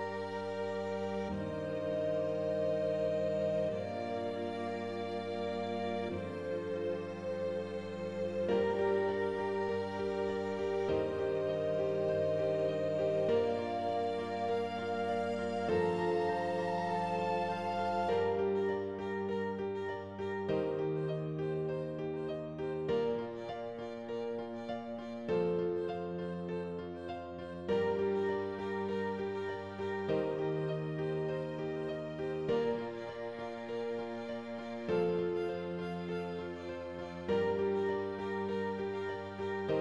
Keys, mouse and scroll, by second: 0.4 middle click, 0.8 scroll up 2, 1.0-4.3 middle drag, 4.8-6.8 middle drag, 7.4 r, 9.0 r, 10.2 g, 12.2 g, 13.7 middle click, 14.3 scroll down 6, 14.9 Tab, 15.0 middle click, 15.6 click, 15.8 scroll down 1, 16.0 middle click, 16.7 g, 17.6 middle click, 18.2-18.6 scroll up 4, 18.6 shift+middle click, 19.5 g, 20.7 scroll down 3, 20.9 middle click, 21.7-23.1 middle drag, 23.1 click, 23.2 scroll down 2, 23.4 middle click, 23.9 scroll down 1, 24.1 g, 25.5 middle click, 26.1 scroll up 3, 26.2 middle click, 27.0-28.5 shift+middle drag, 28.5 scroll down 1, 29.6 shift+a, 30.3 r, 31.4 r, 33.1 click, 33.6 r, 35.9 g, 38.3 g.